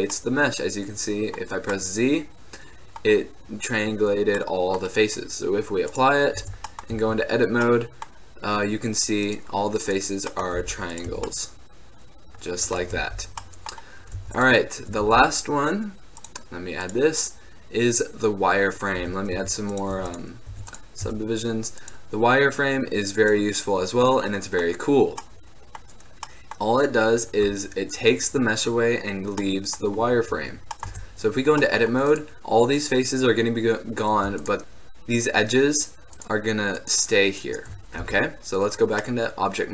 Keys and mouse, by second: 0.3-0.7 middle drag, 6.0 drag, 6.6 Tab, 6.8-7.8 drag, 7.0 z, 10.4-11.5 middle drag, 10.7 e, 11.2 Tab, 11.5-11.8 drag, 11.9 drag, 13.1 ctrl+z, 14.3 x, 15.2 shift+a, 19.1 Tab, 19.4 w, 20.1 w, 20.6 w, 21.1 Tab, 21.9-23.7 drag, 24.5-26.6 middle drag, 31.0 Tab, 32.2-34.2 middle drag, 38.2 Tab, 39.0-39.7 middle drag.